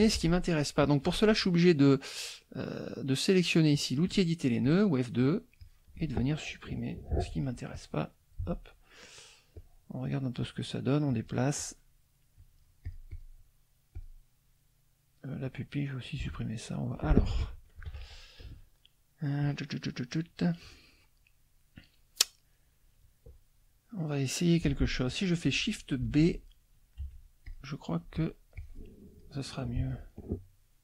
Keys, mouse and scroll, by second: 0.0 F2, 0.0 middle click, 3.7 click, 4.6 click, 5.2 click, 5.6-6.7 drag, 7.7 Delete, 7.7 click, 8.4 Delete, 9.6 click, 10.4 click, 11.1 click, 11.6 click, 12.3 click, 14.0 click, 15.4 click, 16.4 Delete, 19.4 click, 26.0 shift+b, 27.0 F1, 27.5 click, 28.0 F2, 28.1 click, 28.5 click, 29.8 Delete.